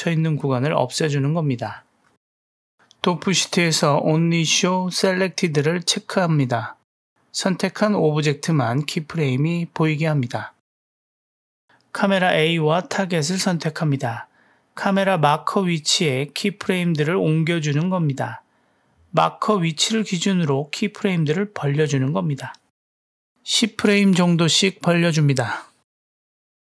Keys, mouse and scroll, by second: 2.3 space, 5.9 click, 13.4 shift+click, 16.0-16.7 drag, 16.7 space, 17.9 space, 19.0 drag, 19.3 space, 20.3 space, 21.5 drag, 22.3 middle click, 23.1 g, 24.0 click, 24.3 g, 26.0-26.6 drag.